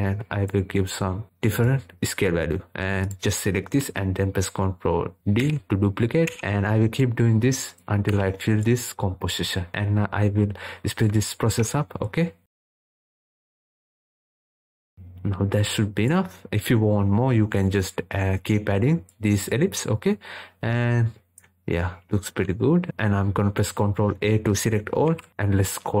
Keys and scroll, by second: 23.1 ctrl+a.